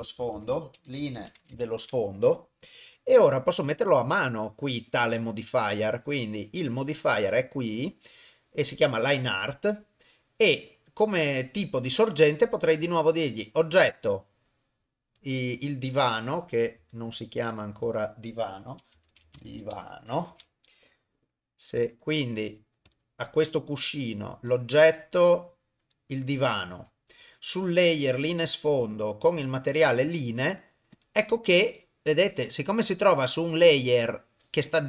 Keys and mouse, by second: 0.3 e, 1.6 click, 3.5 click, 5.2-6.4 drag, 7.1-8.8 drag, 12.5 click, 13.7-16.8 drag, 17.7 F2, 22.8 click, 24.4-28.1 drag, 28.8-30.0 drag, 30.9 click.